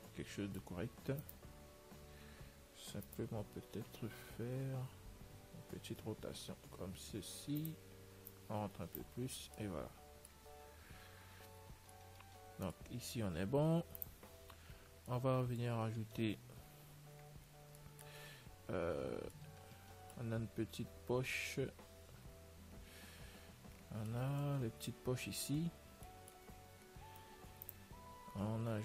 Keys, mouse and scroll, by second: 1.7-3.3 right drag, 2.2 Tab, 3.4-5.2 right drag, 3.9 l, 5.2-7.9 middle drag, 8.6 click, 9.8-14.1 middle drag, 11.2 a, 11.4 Tab, 14.1 ctrl+s, 14.7-17.3 middle drag, 17.4 z, 18.2-28.8 middle drag, 26.8 z, 27.8 ctrl+s.